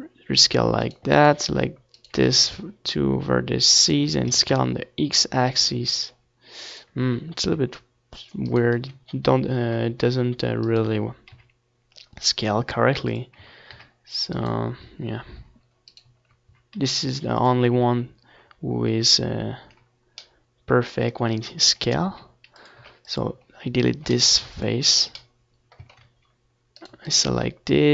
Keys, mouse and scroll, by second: 0.9 s, 2.2 x, 2.4-4.4 middle drag, 4.9-6.6 middle drag, 6.6 s, 7.2 click, 7.4 x, 8.2 click, 8.6 Tab, 9.1 ctrl+s, 10.3 Tab, 11.5-13.7 middle drag, 13.5-15.4 drag, 15.4 s, 16.3-19.3 drag, 18.5 x, 19.4-20.6 middle drag, 21.6-25.3 right drag, 22.8 s, 23.3 x, 25.3-27.9 middle drag, 27.1 z, 27.6 c.